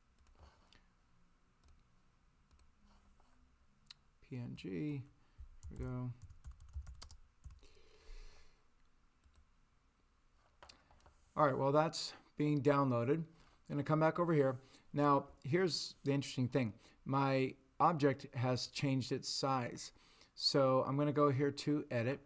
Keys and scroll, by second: 5.6-7.4 typing.